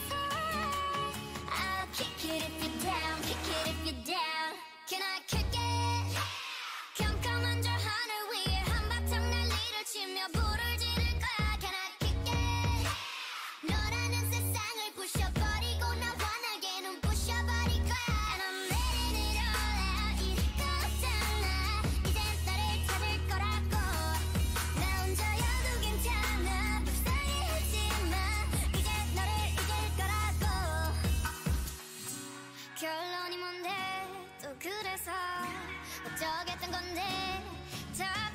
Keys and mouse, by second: 0.2 l, 0.6 r, 2.0 r, 2.6 g, 4.3 a, 4.6 l, 4.9 g, 6.6 shift+l, 6.9 shift+l, 7.6 g, 10.3-12.2 typing, 14.2 a, 14.5 l, 15.3 g, 16.9 g, 18.0 a, 18.9 l, 19.2 r, 20.6 a, 20.9 l, 21.6 l, 22.4 g, 23.7-25.4 typing, 26.5-28.9 typing, 30.3 g, 31.1 a, 31.7 l, 32.1 g, 34.6-37.0 typing.